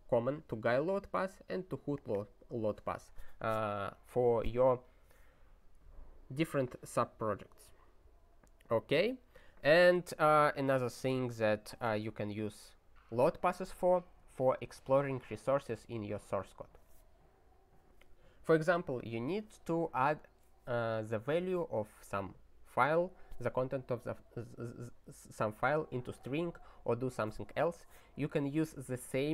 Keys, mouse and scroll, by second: 0.7 click, 0.8 double click, 1.9 click, 2.1 double click, 7.1 click, 7.2 double click, 7.8 click.